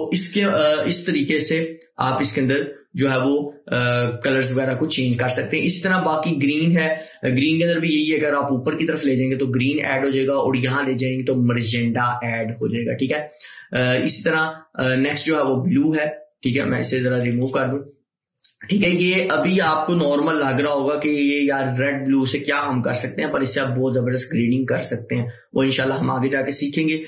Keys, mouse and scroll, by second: 5.1-15.4 drag.